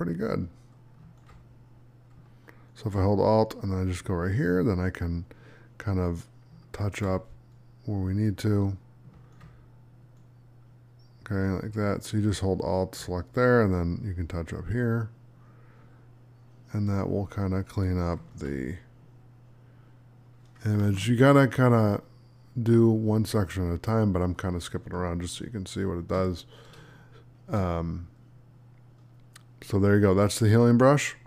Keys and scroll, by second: 24.8 space.